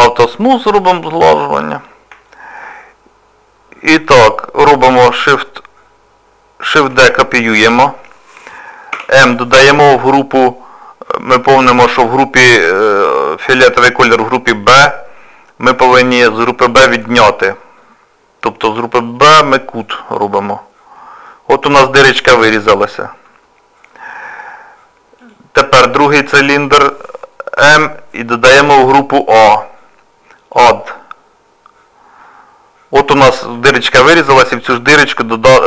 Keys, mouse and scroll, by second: 0.4 middle click, 1.8 scroll down 2, 2.3 shift+middle click, 6.9 shift+d, 9.0 m, 21.0 middle click, 25.2 click, 27.6 m, 32.3 middle click, 33.2 shift+middle click, 33.7-34.3 scroll up 4, 34.3 middle click.